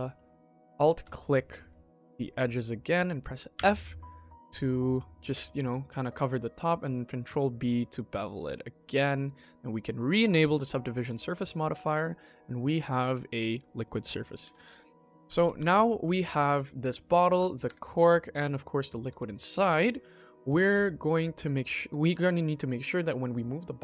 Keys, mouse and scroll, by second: 1.3 alt+click, 1.9 alt+click, 3.4 f, 3.9 middle click, 4.6-5.2 scroll down 2, 5.2 middle click, 6.4 middle click, 6.5 middle click, 6.6 middle click, 7.1 ctrl+b, 8.7 Tab, 10.4 click, 10.8 click, 11.2-11.9 middle drag, 11.9-12.3 scroll down 3, 12.3-13.5 middle drag, 14.3-18.2 typing, 14.8-15.2 scroll down 3, 15.2 click, 15.6 click, 15.9 click, 17.0 click, 17.8 click, 17.9 click, 19.1 click, 19.5 scroll up 2, 19.9-20.3 shift+middle drag, 20.6 ctrl+s, 21.2 shift+middle click, 23.1 click.